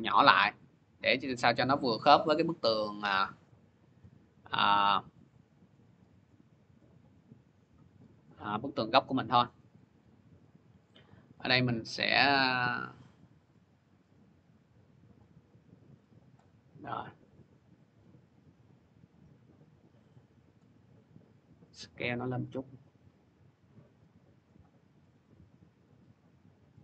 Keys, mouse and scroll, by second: 2.2-3.6 scroll, 6.3 middle click, 6.8 middle click, 9.6 click, 12.0-14.6 drag, 15.7 click, 17.0 scroll, 20.4 click, 21.4-25.5 drag.